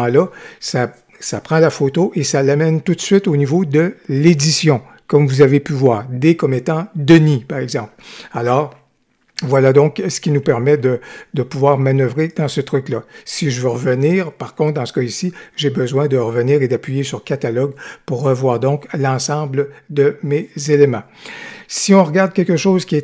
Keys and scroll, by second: 10.6 g.